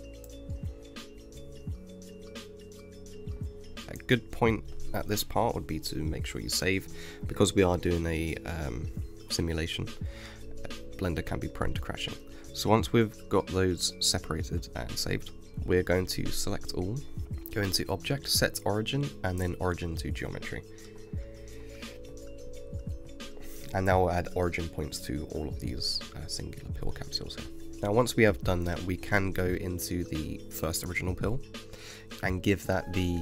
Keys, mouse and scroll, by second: 3.7-5.0 middle drag, 9.9-11.2 middle drag, 11.2 g, 14.9 KP_1, 14.9 shift+middle click, 15.6 click, 16.0-18.5 middle drag, 18.5-21.6 drag, 23.1-26.3 middle drag, 30.8 click.